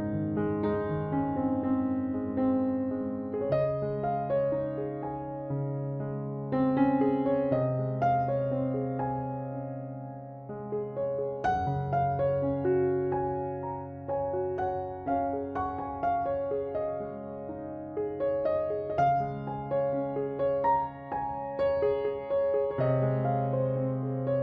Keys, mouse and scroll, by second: 0.1 ctrl+Tab, 1.3 middle click, 2.4 ctrl+r, 3.6 ctrl+Tab, 5.8-10.6 right drag, 9.9 middle click, 11.0-17.3 right drag, 12.7 middle click, 16.0 middle click, 17.3-18.5 middle drag, 18.5-22.5 right drag, 24.3 KP_Decimal.